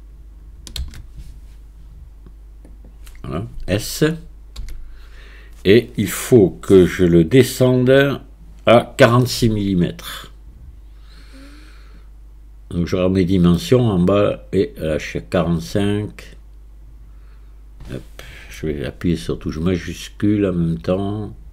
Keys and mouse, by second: 0.8 shift+d, 4.6 s.